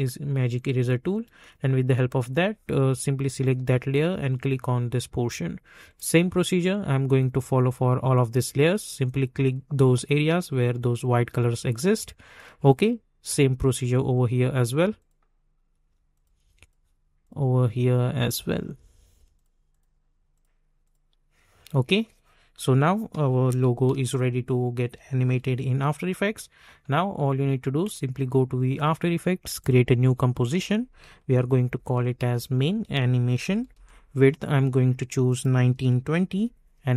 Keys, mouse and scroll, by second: 12.3 click, 23.8 ctrl+s, 25.4 v, 27.8 click, 28.3 -, 29.6 click, 30.9-33.7 typing, 35.2 click, 35.4-36.7 typing.